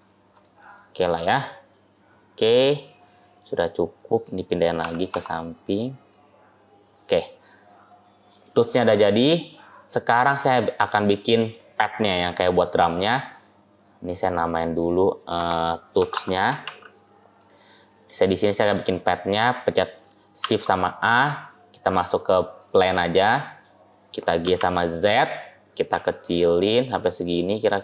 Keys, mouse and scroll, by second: 0.2 click, 0.4 middle click, 1.1-1.6 scroll up 1, 1.6 middle click, 3.8 click, 4.7 g, 7.0 click, 7.4 middle click, 10.2 middle click, 12.6 scroll up 1, 13.0 scroll down 1, 13.1 scroll up 1, 13.2-14.4 scroll down 2, 14.4 click, 14.5 click, 17.6 middle click, 18.3 middle click, 18.7-19.2 scroll up 1, 19.2 click, 20.3 shift+a, 22.8 middle click, 24.3 g, 25.8 s, 27.2 scroll down 1, 27.2 middle click.